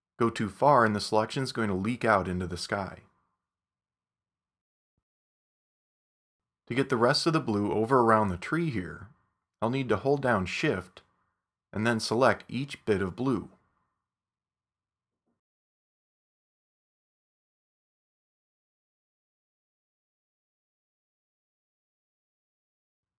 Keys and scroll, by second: 7.6 super+=, 8.6 space.